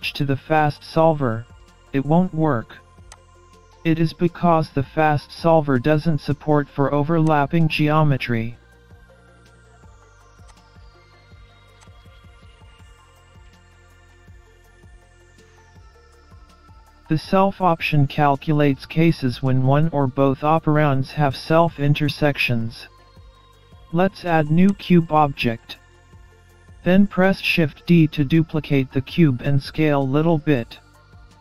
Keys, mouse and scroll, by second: 0.3-1.3 scroll up 2, 2.2 click, 6.8 click, 7.7 scroll up 1, 8.0 middle click, 10.9 click, 11.7 scroll up 1, 12.0 middle click, 13.0-13.4 scroll down 3, 13.4-13.9 scroll up 1, 14.1 click, 15.4 click, 15.9-16.2 scroll up 1, 16.2-16.5 scroll down 2, 16.5 middle click, 19.2 scroll down 2, 19.3 scroll up 1, 19.5 middle click, 26.7 shift+a, 29.3-29.9 scroll down 1, 29.9-30.2 scroll down 2, 30.2 middle click.